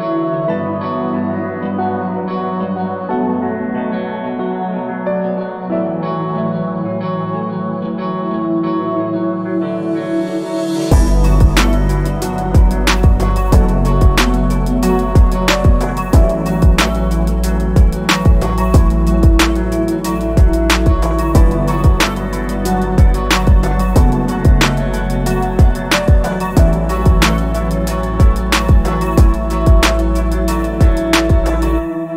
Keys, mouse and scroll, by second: 1.4 click, 1.5 middle click, 1.8 scroll down 1, 2.0 middle click, 2.0 Tab, 2.2 scroll up 1, 2.4-3.6 middle drag, 3.6 Tab, 3.8 scroll up 1, 4.1 middle click, 4.6 l, 5.1 l, 5.4 middle click, 5.6 scroll up 1, 5.7 middle click, 6.0 s, 7.0 click, 7.0 Tab, 7.3 middle click, 7.5 scroll down 1, 7.6 middle click, 8.3-9.0 scroll down 1, 9.0 middle click, 9.4 click, 10.4 click, 10.5 middle click, 10.7 scroll up 1, 11.0 click, 11.9-12.3 ctrl+KP_Add, 12.6-13.2 scroll up 5, 13.0 shift+middle click, 13.6 click, 14.4 ctrl+KP_Add, 14.6-15.2 scroll down 3, 15.3 p, 15.9 middle click, 17.1 click, 17.2 Tab, 17.4 scroll down 1, 17.6 middle click, 17.6 Tab, 18.1 Tab, 18.2 click, 19.0 click, 19.2 KP_1, 19.9 click, 20.1 scroll up 3, 20.9 click, 22.7 shift+s, 23.1 scroll up 1, 23.6 shift+a, 24.7 click, 26.1 s, 27.2-27.7 scroll up 4, 27.4 shift+middle click, 27.7 shift+middle click, 27.9 s, 28.3 middle click, 28.5 scroll down 5, 28.7 shift+middle click, 28.8-29.7 scroll up 4, 29.1 click, 29.2 shift+middle click, 29.7-31.7 typing, 30.0 shift+middle click, 30.9 middle click, 32.0 shift+middle click.